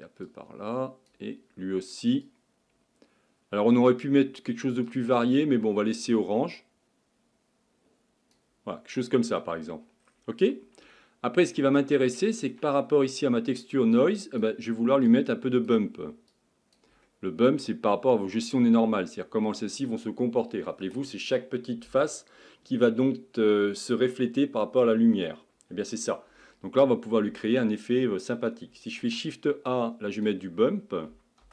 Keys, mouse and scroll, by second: 0.4-5.9 drag, 13.9-31.5 drag.